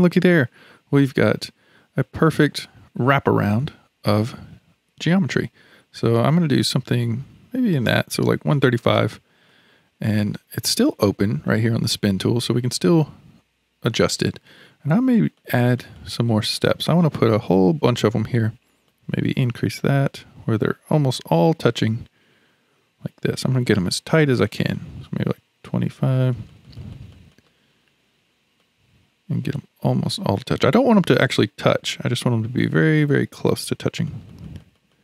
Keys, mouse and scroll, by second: 9.5-11.5 middle drag, 11.5-14.2 drag, 14.2-15.1 scroll up 1, 15.1 scroll up 1, 15.4-21.9 drag, 22.1-24.6 scroll up 6, 24.6-31.6 drag, 34.1-35.0 drag.